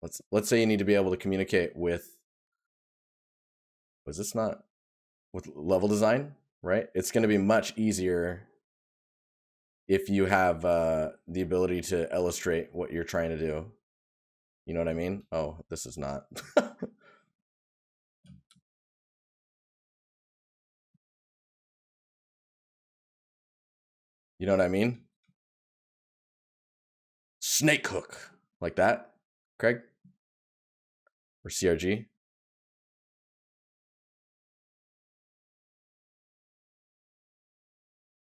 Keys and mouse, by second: 20.4 right click, 22.8 right click, 24.1 right click, 29.5 right click, 34.8 right click.